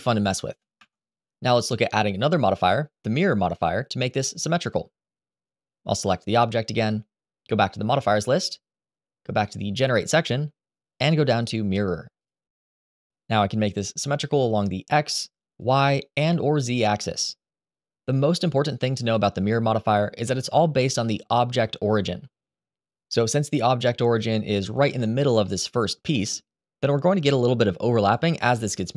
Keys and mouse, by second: 0.2 shift+middle click, 5.7 click, 7.7-13.1 drag, 18.0-20.1 middle drag, 23.8 click, 24.6 click, 25.2-25.6 middle drag, 25.9 shift+middle drag, 26.5-26.8 shift+middle drag, 28.5 click.